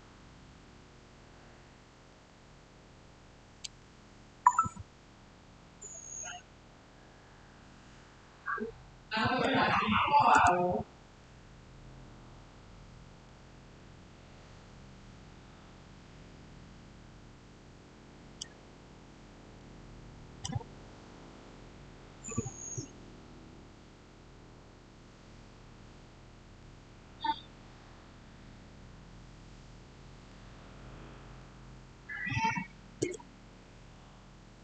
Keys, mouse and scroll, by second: 8.9-9.7 typing, 9.1 shift+middle click, 10.2 Return, 13.1-22.6 middle drag, 30.6-31.7 typing, 33.8 scroll down 1.